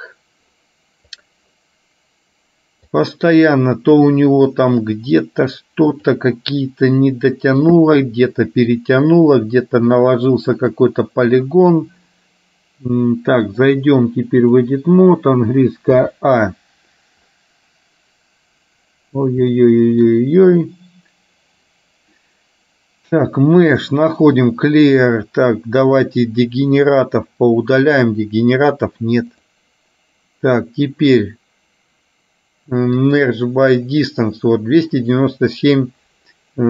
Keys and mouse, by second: 1.2-3.2 drag, 5.0-6.2 drag, 10.7-12.0 drag, 13.6-14.7 drag, 19.6 shift+middle click, 23.4-26.4 drag, 29.4-33.4 drag.